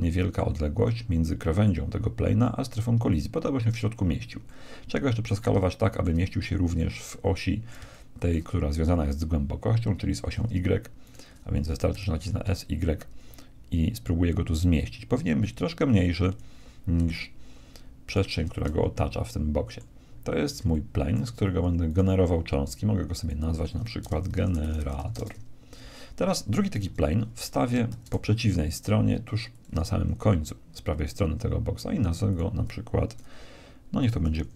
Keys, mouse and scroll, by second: 4.4-9.8 middle drag, 11.0-12.8 right drag, 11.9 s, 18.0-20.0 right drag, 18.6-19.8 middle drag, 20.0-21.8 middle drag, 21.8-23.2 right drag, 23.2 middle click, 23.6-25.1 drag, 26.8 KP_1, 27.9 shift+d, 32.2-34.0 drag.